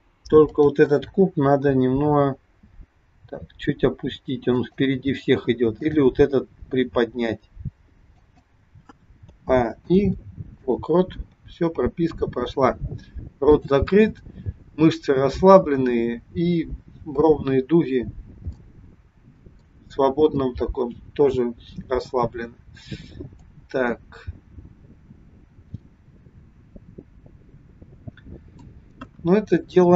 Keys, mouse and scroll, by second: 0.3 click, 2.1 g, 5.7 click, 6.6 g, 9.3 a, 9.8 i, 13.4 click, 18.4 middle click, 23.6 click, 29.0 KP_1.